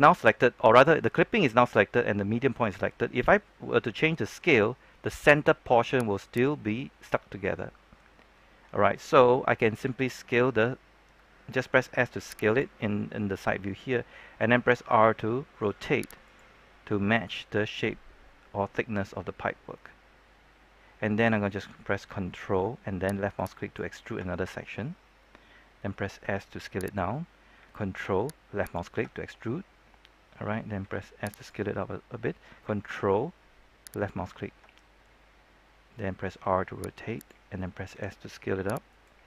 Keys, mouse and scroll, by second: 3.8 s, 6.2 right click, 9.8 s, 12.4 click, 14.3 r, 16.2-17.2 drag, 23.3 ctrl+click, 26.0 s, 26.8 click, 28.5 ctrl+click, 30.7 s, 31.3 click, 33.8 ctrl+click, 36.3 r, 37.1 click, 37.9 click, 37.9 s.